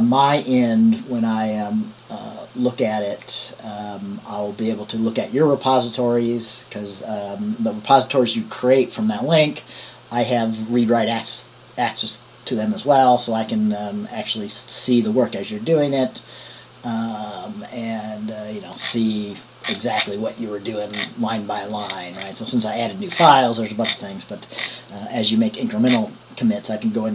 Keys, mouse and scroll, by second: 22.2-22.7 scroll down 1, 22.7-23.4 scroll down 1, 23.4 scroll down 1, 24.8-26.1 scroll down 1, 26.1-27.1 scroll down 1.